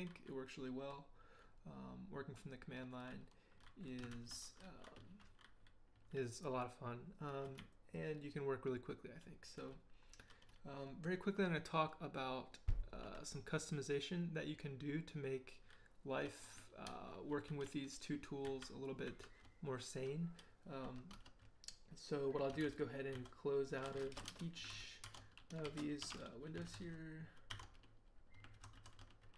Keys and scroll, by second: 4.1 ctrl+h, 7.3 k, 7.6 k, 10.5 k, 16.9 ctrl+l, 17.3 ctrl+h, 17.6 ctrl+l, 18.4 ctrl+j, 19.0 ctrl+h, 22.6 ctrl+d, 23.1 ctrl+d, 24.2 ctrl+shift+;, 24.2 ctrl+shift+q, 24.3 Return, 24.7-26.8 typing, 27.5 ctrl+d, 28.5 ctrl+c, 28.7 ctrl+c.